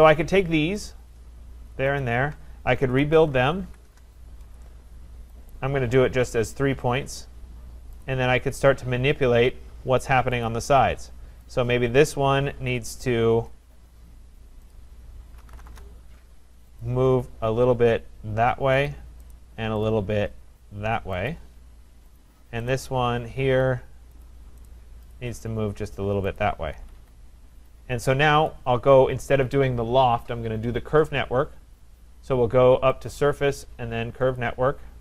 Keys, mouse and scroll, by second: 0.9 click, 2.1 shift+click, 2.6-4.1 typing, 5.5 click, 5.5-6.6 typing, 8.1 click, 10.4 Return, 10.5 click, 11.6 click, 13.9-14.6 scroll down 2, 14.7 click, 15.2-16.1 typing, 16.8 click, 18.9 click, 19.3 right click, 19.9 click, 21.3 click, 22.1 click, 22.1 right click, 22.2 click, 22.7 right click, 23.4 Escape, 24.3 click, 24.7 right click, 25.1 click, 26.4 click, 26.7 Escape, 26.9 Escape, 28.1 Escape, 28.5 click, 33.6 click, 34.4 click.